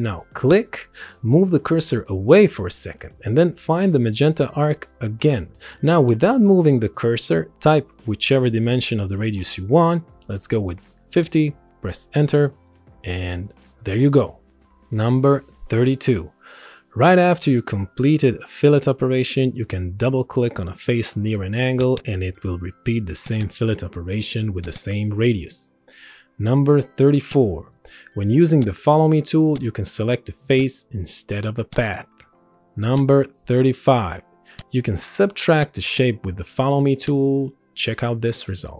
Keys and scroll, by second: 10.6 KP_5, 11.2 KP_0, 12.0 Return.